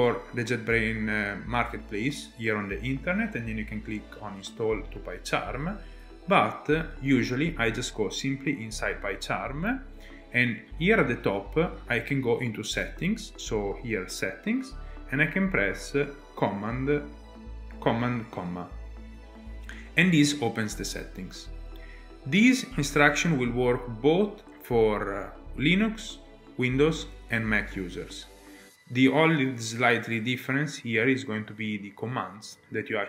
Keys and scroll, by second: 6.0 alt+Tab, 18.4 super+,.